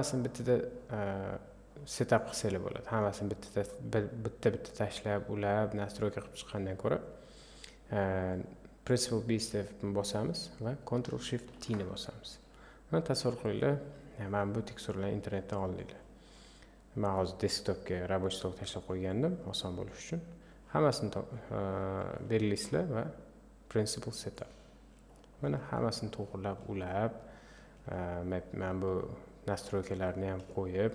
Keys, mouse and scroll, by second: 8.3-11.6 drag, 11.6 ctrl+shift+t, 24.6-25.0 scroll down 5.